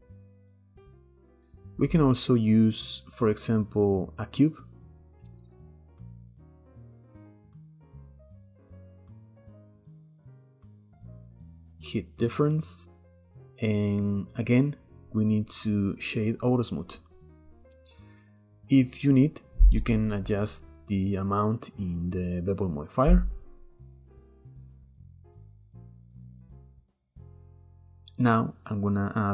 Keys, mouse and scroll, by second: 0.2 scroll down 1, 0.3-1.7 shift+middle drag, 1.7-3.3 drag, 3.3-4.8 shift+middle drag, 4.8 drag, 7.0 middle click, 7.2 scroll up 2, 7.9 click, 9.3 click, 10.0-10.6 middle drag, 10.6 click, 10.9-12.2 middle drag, 12.2 click, 13.1-16.3 right drag, 17.2-17.8 middle drag, 17.8-19.9 scroll up 2, 19.9-22.9 shift+drag, 27.6 scroll up 1, 27.6-28.5 drag, 28.5-29.3 middle drag.